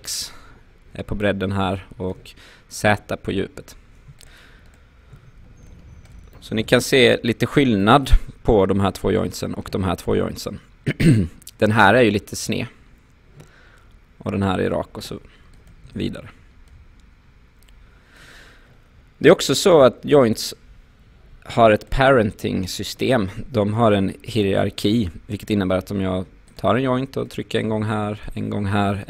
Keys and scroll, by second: 15.9 w, 21.3 Delete.